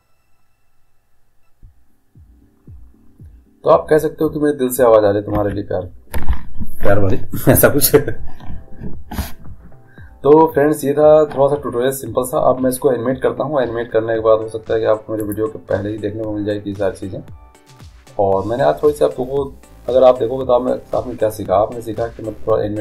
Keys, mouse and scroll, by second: 5.4 Escape, 15.3-17.3 drag.